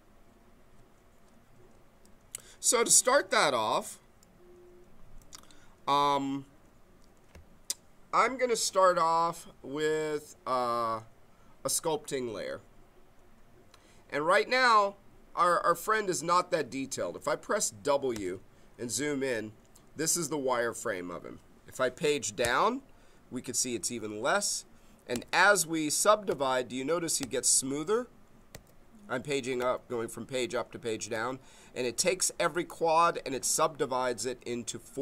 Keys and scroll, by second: 18.1 w, 22.4 Page_Down, 25.1 Page_Up, 26.5 Page_Down, 27.2 Page_Up, 28.5 Page_Down, 29.6 Page_Up, 31.1 Page_Down, 31.9 Page_Up.